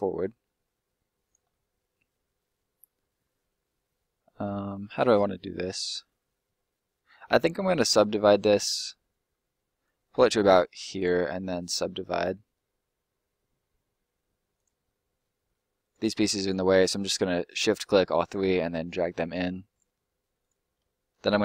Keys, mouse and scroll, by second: 1.4 middle click, 6.2-6.6 scroll up 1, 6.6 middle click, 9.8 click, 14.5 click, 15.0 scroll up 1, 15.2 middle click, 16.1 shift+right click, 17.5 middle click, 18.7 click, 20.4 right click, 20.9 shift+right click.